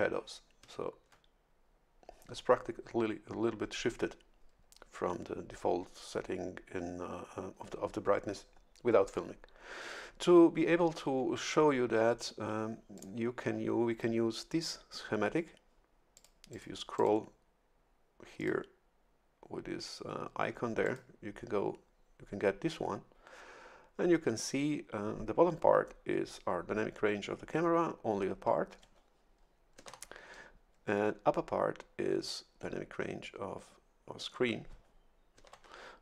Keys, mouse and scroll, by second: 12.9 click, 16.1 click, 16.5 click, 16.9 click, 18.4 click, 20.8 click, 29.8 shift+F11, 35.4 shift+F11.